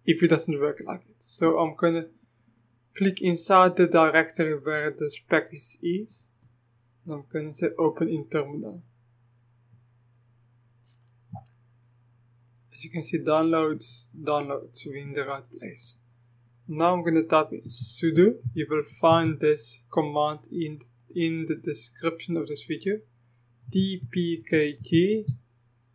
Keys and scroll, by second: 17.4-19.3 typing, 23.4-25.9 typing.